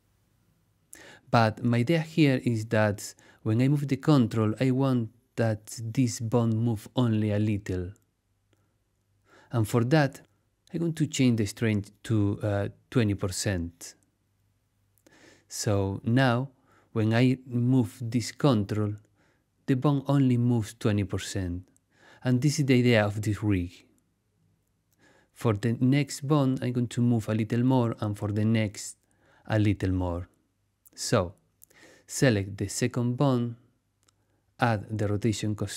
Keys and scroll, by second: 1.1 super+z, 13.2-14.2 typing, 14.6 Return, 25.1 super+z.